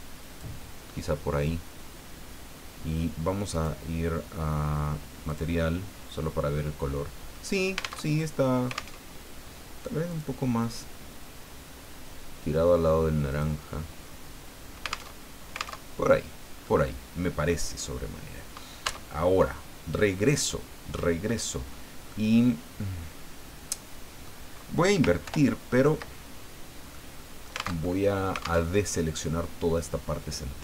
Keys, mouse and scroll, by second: 3.5 click, 5.3 click, 6.2 scroll down 2, 6.6 middle click, 7.5-8.0 scroll up 2, 8.0 alt+Tab, 9.0 alt+Tab, 10.1 click, 13.3 click, 15.1 alt+Tab, 15.8 alt+Tab, 16.6-18.7 drag, 18.8 Tab, 22.1-24.4 drag, 25.2 ctrl+i, 26.9 click, 27.8 alt+Tab, 28.6 alt+Tab, 28.9 alt+click.